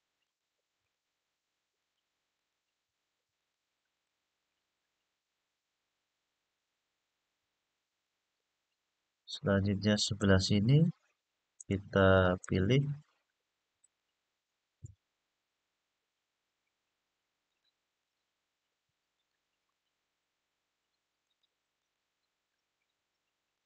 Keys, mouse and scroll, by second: 0.0 alt+shift+click, 0.5 alt+shift+click, 1.5 alt+shift+click, 2.1 alt+shift+click, 3.1 alt+shift+click, 3.7 alt+shift+click, 4.4 scroll down 2, 5.6 scroll down 1, 6.6 scroll up 1, 7.8-9.9 middle drag, 11.3 alt+shift+click, 12.1 alt+shift+click, 13.6 alt+shift+click, 14.4-15.8 alt+shift+scroll up 4, 15.8 scroll down 1, 17.2 alt+shift+click, 17.7 alt+shift+click, 18.9 alt+shift+click, 19.4 alt+shift+click, 20.9 alt+shift+click, 21.5 alt+shift+click, 23.3 alt+shift+click.